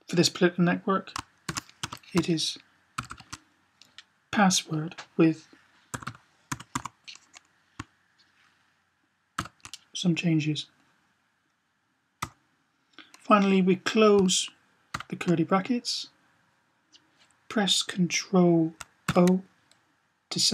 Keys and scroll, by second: 1.4 typing, 2.9 typing, 5.4-6.6 typing, 9.2 typing, 14.7 typing, 18.8 ctrl+o.